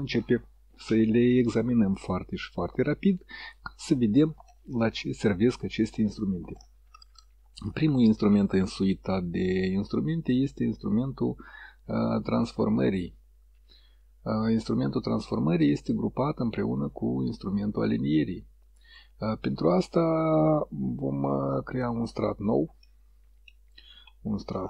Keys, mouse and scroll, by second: 14.6 click, 21.3 1, 22.7 scroll up 2, 22.8 middle click, 23.7-24.1 scroll down 2, 24.1 scroll up 2, 24.2 scroll down 2.